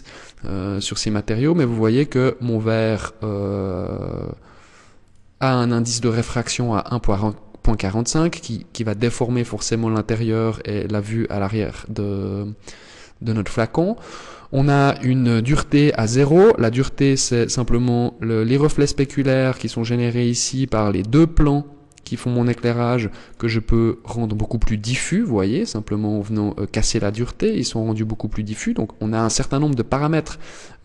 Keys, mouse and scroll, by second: 4.1 click, 22.7 click, 27.6 click.